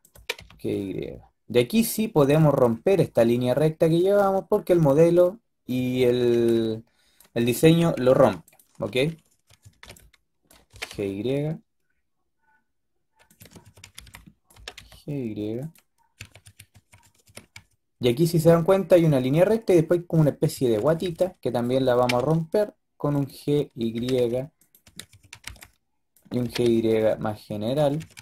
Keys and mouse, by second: 0.0 g, 5.6 a, 5.8 a, 6.0 a, 6.2 b, 7.7 Delete, 9.2 a, 9.5 a, 9.7 b, 10.6 g, 13.2-14.4 typing, 16.0-17.4 typing, 20.4-21.8 typing, 23.8-25.3 typing, 26.3 g, 27.7-28.2 typing.